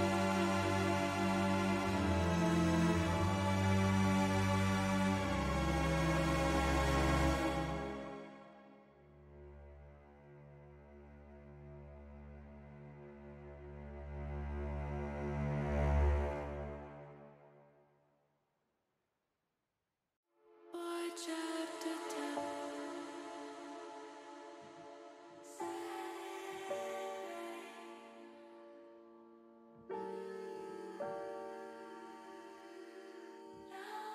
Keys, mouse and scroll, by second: 0.3 alt+shift+click, 1.4 ctrl+KP_Add, 1.5 ctrl+KP_Add, 1.7 ctrl+KP_Add, 1.8 ctrl+KP_Add, 2.1 ctrl+KP_Add, 2.4 ctrl+KP_Add, 2.7 ctrl+KP_Add, 2.8 ctrl+KP_Add, 3.0 ctrl+KP_Add, 3.8 ctrl+KP_Subtract, 4.0 ctrl+KP_Subtract, 5.1 middle click, 6.3 s, 7.5 click, 8.2-12.6 drag, 16.4 ctrl+z, 19.5 h, 20.6 middle click, 21.3 click, 22.0 click, 24.7 shift+middle click.